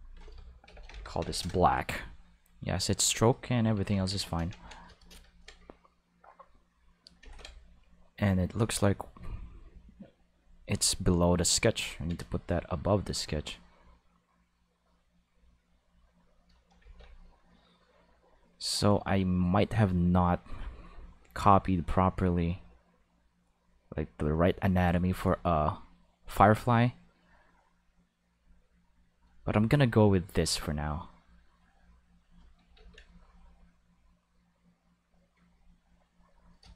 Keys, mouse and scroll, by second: 0.7 shift+b, 0.9 l, 1.2 c, 1.3 k, 1.4 Return, 4.0 ctrl+s, 6.1 click, 7.2 ctrl+z, 8.4 click, 10.4 click, 10.7 click, 13.5-16.7 drag, 16.8 ctrl+z, 17.2-18.6 drag, 19.1 click, 23.4-24.7 drag, 26.5-30.1 drag, 30.2-32.2 drag, 32.8 ctrl+z, 33.3-35.4 drag.